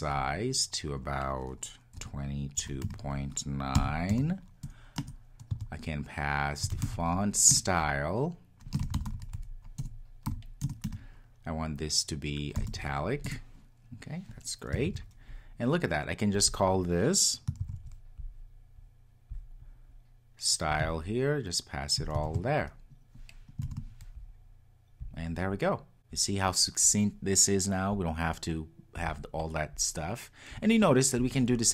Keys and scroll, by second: 7.5 Return, 13.2 Return, 14.8 super+s, 17.9 super+c, 22.3 super+v.